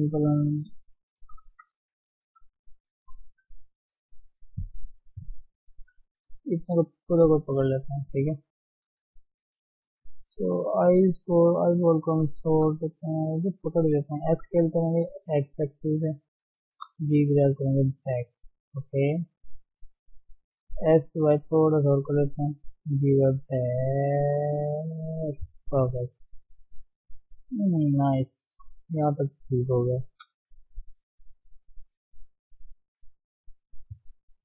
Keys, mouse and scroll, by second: 0.3 Tab, 1.0 shift+click, 1.5 Tab, 8.5 shift+middle click, 8.8-9.5 scroll up 1, 9.7 ctrl+click, 10.0-10.3 scroll up 1, 11.1 click, 13.2 ctrl+z, 13.6-14.3 scroll down 1, 14.3 s, 16.7 g, 20.8 s, 22.6 g, 25.6 shift+z, 25.9 Tab, 26.1-27.0 scroll down 4, 27.0 scroll up 1, 27.6 scroll down 1, 28.1-28.5 scroll up 1, 28.5 KP_1, 28.8-29.8 scroll up 4, 29.8 scroll down 1, 30.0-30.5 scroll up 2, 30.5 shift+middle click, 31.1 ctrl+z, 31.4 ctrl+z, 31.6 ctrl+z, 31.9 ctrl+z, 32.1 ctrl+z, 32.4 ctrl+z, 33.0 ctrl+shift+z, 33.2 ctrl+shift+z.